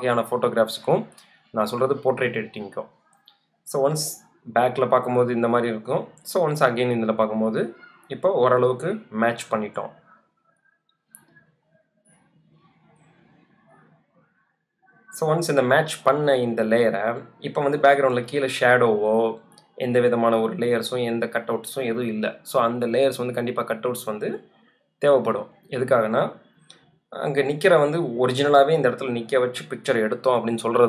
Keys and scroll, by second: 8.8 super+z, 11.0 super+z.